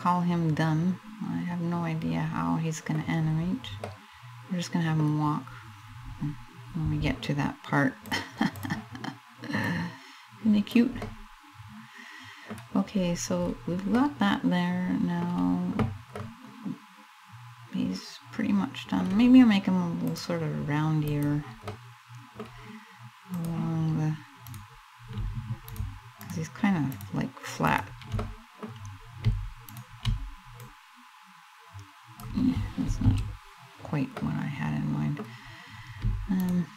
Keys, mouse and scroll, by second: 2.9-3.5 scroll down 2, 3.5 middle click, 7.7 click, 9.3 click, 10.6 middle click, 12.2-12.8 scroll up 3, 13.0-13.6 scroll down 1, 13.6 middle click, 13.6 scroll down 1, 15.8 middle click, 19.7 click, 21.4 middle click, 23.1 click, 24.1 right click, 25.3 shift+right click, 25.9 shift+right click, 26.5 shift+right click, 27.3 shift+right click, 27.9 middle click, 29.3 shift+right click, 30.2 click, 32.6 ctrl+z, 33.8 middle click, 35.2 scroll up 2, 36.0 shift+right click, 36.6 shift+right click.